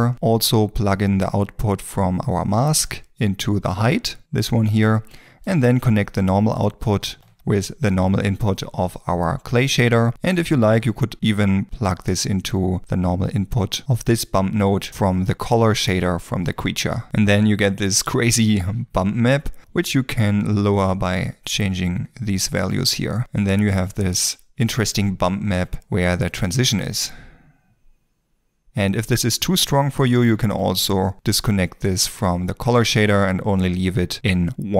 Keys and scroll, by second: 7.2 ctrl+space, 16.1 ctrl+s, 16.1 ctrl+space, 26.6 g.